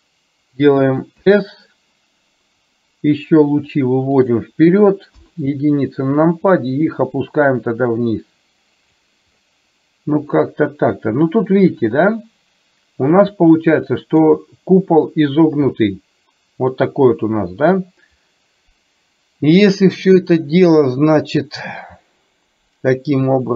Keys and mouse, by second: 5.2 KP_1, 6.9-9.1 drag, 10.5-14.4 middle drag, 15.7-23.5 middle drag.